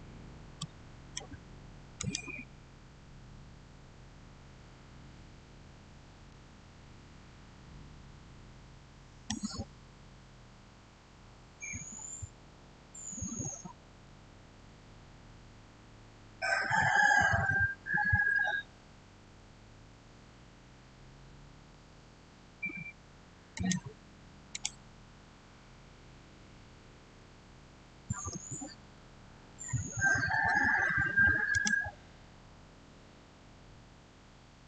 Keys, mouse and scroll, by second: 0.4-1.8 middle drag, 1.8 click, 5.8 click, 6.1-12.3 shift+middle drag, 14.1-15.0 typing, 18.8-19.6 typing, 20.8 Return, 23.4 click, 27.6-28.5 typing, 28.7 Return, 31.4 click.